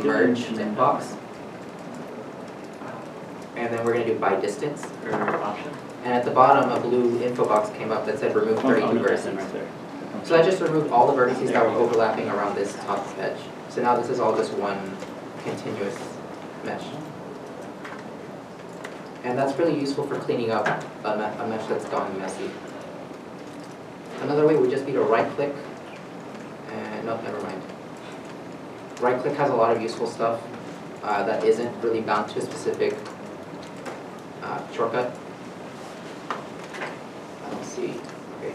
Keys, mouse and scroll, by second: 9.9 alt+m, 10.5 scroll up 1, 11.9 middle click, 12.4 scroll down 1, 13.2 g, 15.6 right click, 16.4 g, 17.5 right click, 18.2 middle click, 18.3 scroll down 1, 19.1 2, 19.7 alt+click, 20.2 scroll down 1, 21.8 scroll down 1, 22.4 scroll down 1, 23.5 shift+middle click, 24.2 a, 27.9 a, 27.9-28.4 scroll up 1.